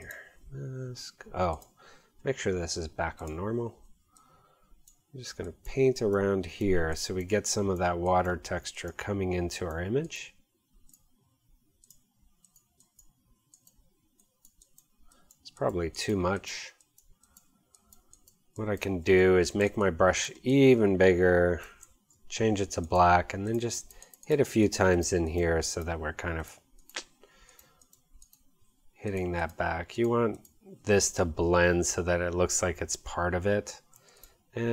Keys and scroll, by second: 34.0 x.